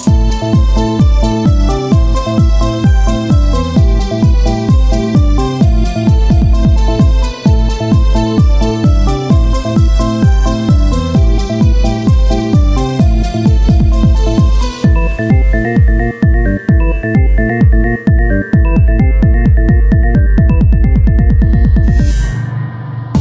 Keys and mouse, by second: 0.5 Tab, 1.0 ctrl+Tab, 1.0 click, 1.7-3.3 drag, 4.1 r, 5.5 click, 6.1 e, 7.3 click, 7.9 Tab, 13.7 Tab, 14.5 e, 16.9 r, 18.6 e, 20.5-22.3 drag, 22.3 e.